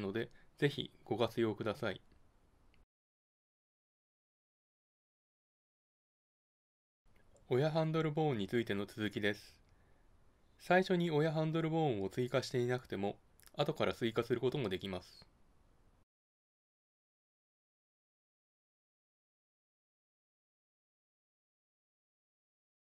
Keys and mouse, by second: 15.1-19.1 drag.